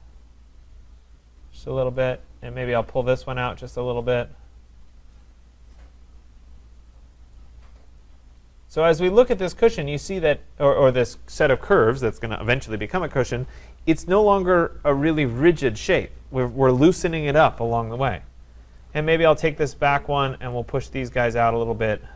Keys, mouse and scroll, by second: 1.9 click, 2.8 click, 7.3 click, 8.0 click, 8.6-12.8 scroll, 18.8 click, 20.5 click.